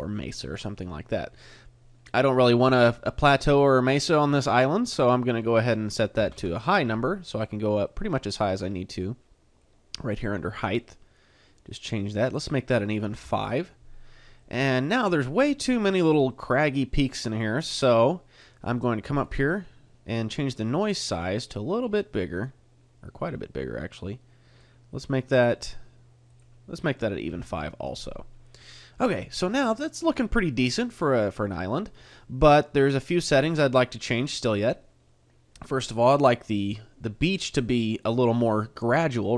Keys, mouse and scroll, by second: 3.4 middle click, 4.9 click, 7.9 middle click, 9.6 click, 12.3 click, 14.3 middle click, 15.7 middle click, 16.3 middle click, 17.0 middle click, 18.4 click, 25.0 middle click, 26.3 click, 28.6 middle click, 31.7 middle click, 35.1 middle click, 37.5 middle click.